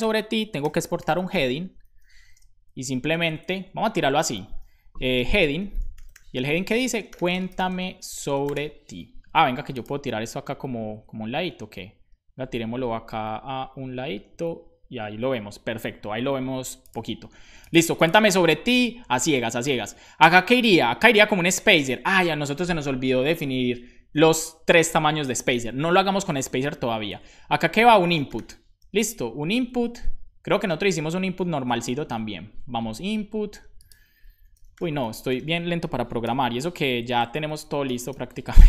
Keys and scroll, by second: 0.3-2.3 typing, 4.9-8.0 typing, 18.8 super+Right, 19.2 Return, 25.9 BackSpace, 27.2-28.8 typing, 29.2 shift+Up, 29.8 Up, 30.2 Right, 30.7 super+Right, 31.3 super+Right, 32.0 super+Left, 34.2-35.5 typing, 36.2 super+b, 37.1 Left, 37.3 Left, 37.4 Left, 37.6 Left, 37.8 BackSpace.